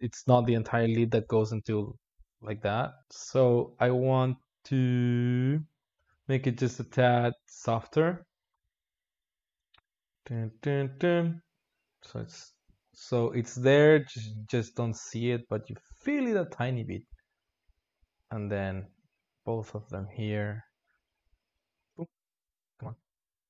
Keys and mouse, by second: 3.0 click, 4.0 g, 6.0 drag, 6.2 alt+shift+z, 6.7 alt+shift+z, 7.5 click, 9.8-12.5 drag, 12.5 g, 16.5-18.7 drag, 19.7 shift+Left, 20.4-21.8 drag, 21.8 shift+Left, 22.2 shift+Left, 23.0-23.4 drag.